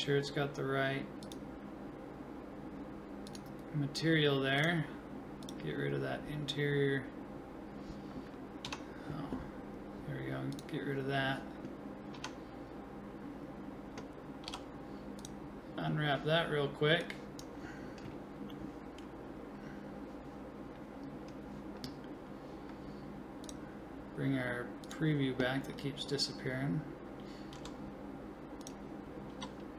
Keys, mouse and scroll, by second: 8.7 Tab, 12.2 Tab, 13.3-15.5 middle drag, 14.5 u, 15.8-17.0 middle drag, 17.0-18.6 drag, 22.1-23.4 middle drag, 25.6-27.6 middle drag, 27.6 s, 29.3 g.